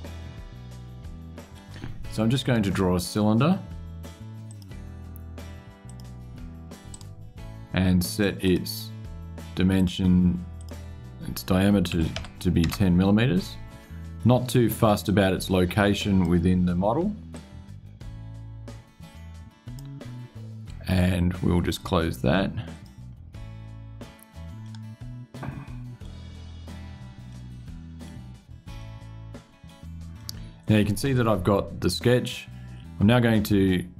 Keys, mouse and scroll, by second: 2.2 click, 4.2 click, 5.6 click, 6.6 right click, 8.2 click, 9.5 click, 10.3 click, 11.7 KP_1, 11.9 KP_0, 12.4 KP_Enter, 14.8-16.2 drag, 17.1-19.7 drag, 22.5 click, 24.4 click, 25.0 middle click, 27.0 middle click, 28.5-29.6 middle drag, 29.9 middle click.